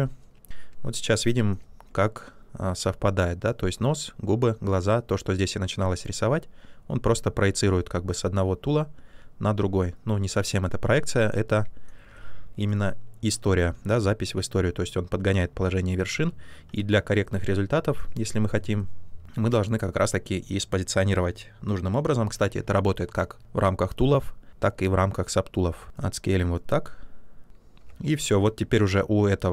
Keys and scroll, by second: 16.1 ctrl+z, 25.8 w, 27.8 q.